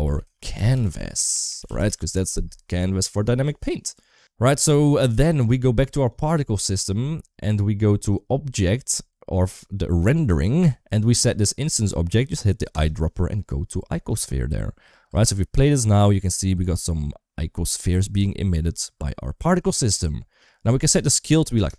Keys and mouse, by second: 1.1 BackSpace, 4.0 click, 14.9 space, 20.2-21.5 drag.